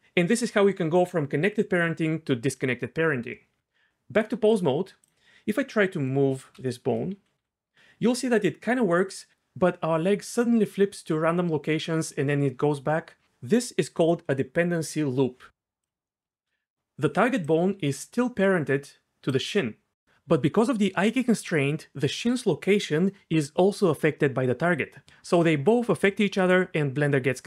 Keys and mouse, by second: 3.6 Tab, 7.4 g, 15.8 click, 17.1-19.4 d, 20.1-22.1 d, 20.3 click.